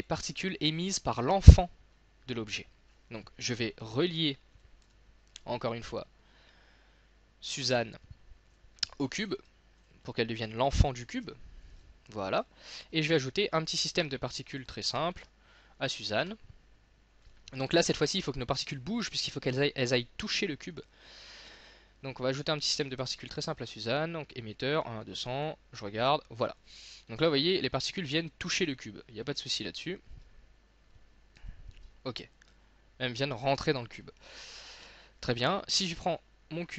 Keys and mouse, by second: 0.1 click, 2.9-3.9 drag, 3.9 x, 4.6 click, 4.9 s, 5.8 middle click, 6.5 click, 11.1 ctrl+p, 14.1 e, 14.5-15.7 drag, 15.2 z, 17.3-18.8 drag, 22.2-23.4 drag, 23.0 s, 25.5 click, 27.3-29.4 middle drag, 30.3 e, 31.4 z, 34.7 z, 35.7-36.7 drag.